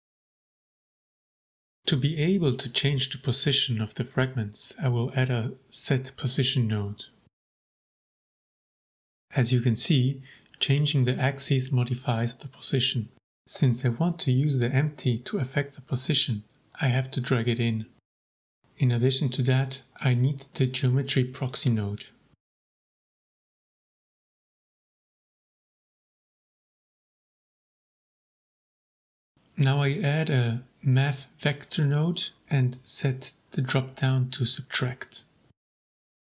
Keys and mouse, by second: 0.5 middle click, 1.0 click, 3.4 right click, 4.6 shift+a, 8.5 click, 9.4 click, 10.4 click, 10.9 click, 11.9-12.9 drag, 15.5-16.2 drag, 16.4 middle click, 16.9 click, 19.5 shift+a, 23.8 click, 24.4-25.4 drag, 26.6 right click, 27.3 shift+a, 32.4-33.1 drag, 33.6-34.2 drag, 34.6-35.7 drag.